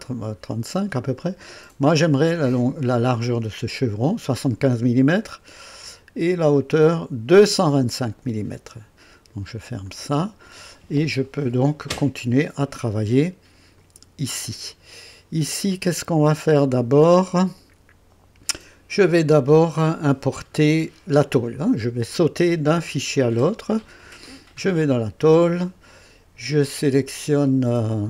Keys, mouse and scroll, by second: 0.6 scroll up 2, 1.2 right click, 3.3 click, 6.3 click, 9.8 click, 13.8 click, 24.0 click.